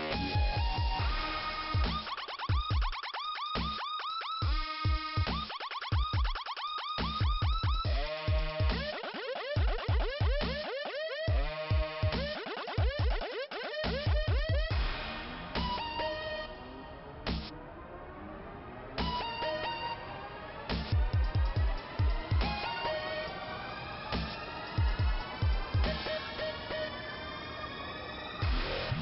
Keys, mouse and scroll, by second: 0.1 click, 0.2 click, 0.3 click, 0.4 click, 1.8 click, 3.3 click, 4.2-4.6 scroll down 2, 5.9 scroll up 1, 6.5 click, 9.5 shift+Return, 10.3 click, 13.4 shift+Return, 14.1 middle click, 17.5 shift+Return, 18.1 click, 22.1 click, 23.0 middle click, 25.8 shift+Return, 26.2 click, 26.4 click, 28.4 click.